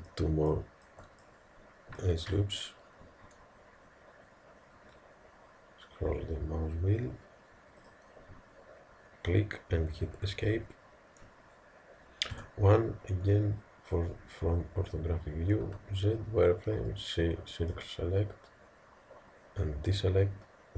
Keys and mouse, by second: 0.5-2.8 middle drag, 3.0 ctrl+r, 12.4 KP_1, 15.7 z, 16.8 c.